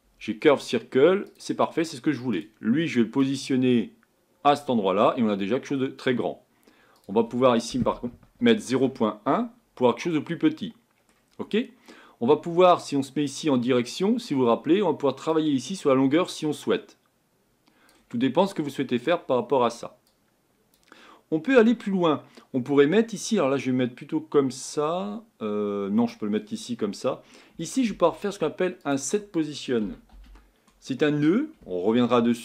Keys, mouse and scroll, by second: 4.6 click, 8.9 click, 9.8-13.3 middle drag, 13.3 click, 13.8-14.4 scroll down 2, 15.5-18.2 drag, 18.2-18.7 scroll down 2.